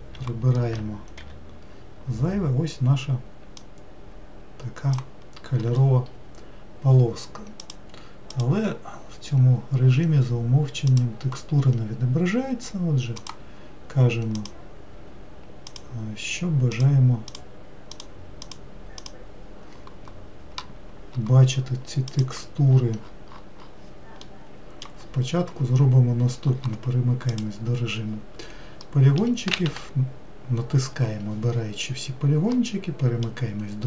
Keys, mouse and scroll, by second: 0.0-1.8 drag, 1.8 t, 4.2-6.6 drag, 6.6-11.4 scroll down 2, 11.4-14.9 drag, 24.7 middle click, 25.5-27.9 scroll down 2, 27.9-29.3 drag, 29.3 middle click, 30.0 a.